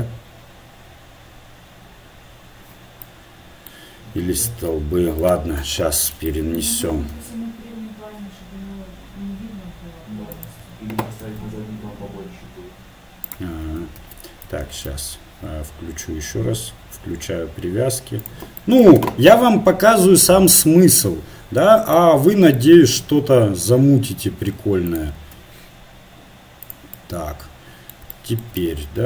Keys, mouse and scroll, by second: 3.0-4.5 middle drag, 4.5 s, 5.6 KP_7, 6.3 middle click, 7.1 shift+d, 11.2 shift+d, 14.0 ctrl+z, 14.7 ctrl+z, 18.2-20.0 drag, 19.3 shift+d, 23.0-24.3 drag, 25.2 shift+d.